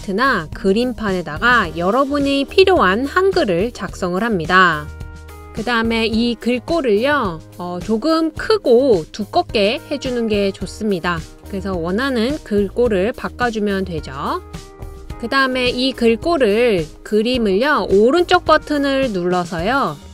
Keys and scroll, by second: 0.0-5.1 typing.